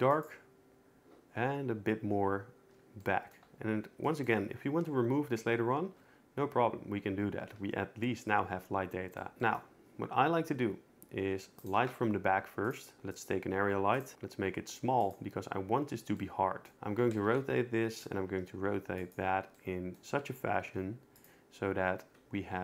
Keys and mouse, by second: 0.1 click, 11.6 shift+right click, 11.8 shift+a, 13.0 s, 14.0 click, 14.1 alt+r, 14.1 s, 16.7 x, 16.9 r, 17.1 z, 18.0-18.3 drag, 18.3 g, 20.7 g, 22.4 g.